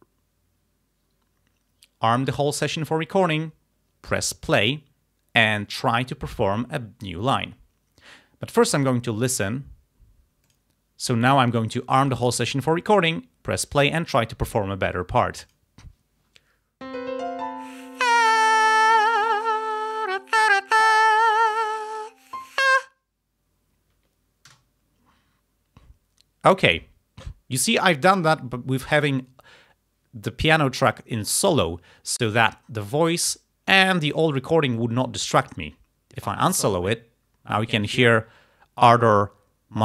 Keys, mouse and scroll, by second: 2.1 click, 10.5 click, 12.1 click, 15.5 click, 24.6 space, 36.2 click.